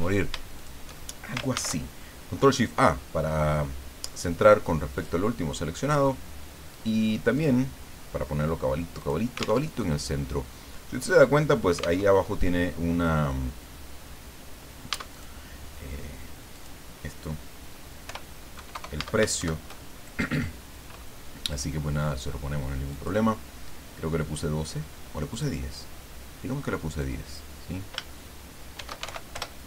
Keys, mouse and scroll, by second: 0.5 shift+click, 1.5 ctrl+shift+a, 4.9 click, 7.3 click, 9.0 click, 9.7 alt+Tab, 12.0 alt+Tab, 15.1 click, 16.5 click, 18.0 o, 18.6 KP_6, 18.7 KP_0, 19.4 shift+Home, 22.9 click, 25.3 click, 27.1 click, 28.7 shift+e, 29.0 shift+x, 29.3 shift+Return.